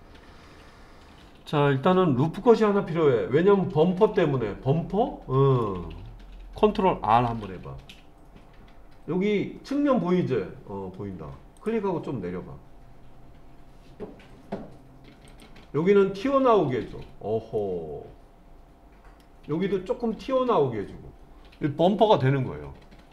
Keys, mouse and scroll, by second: 4.1-5.7 middle drag, 7.3 ctrl+r, 15.3 click, 17.6-19.2 middle drag, 19.8-23.1 middle drag.